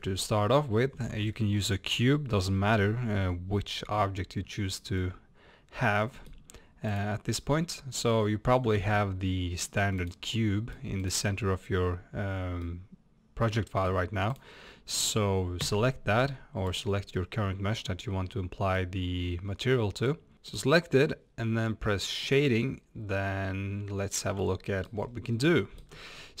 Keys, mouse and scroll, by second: 4.7-5.0 scroll up 1, 5.2 middle click, 5.9-7.0 middle drag, 7.0 click, 9.2-9.7 drag, 10.4-11.1 middle drag, 11.1 click, 12.7 middle click, 13.6-14.4 middle drag, 14.4-15.9 drag, 17.2-20.3 middle drag, 20.3 click, 22.3 click, 23.1 scroll up 1, 24.4-26.4 shift+middle drag, 25.0 scroll up 1.